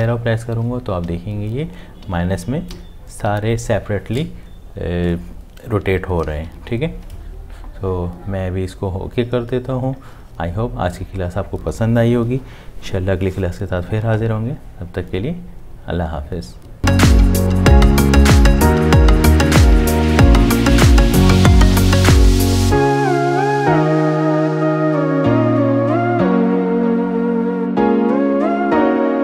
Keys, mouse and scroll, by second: 6.5 Up.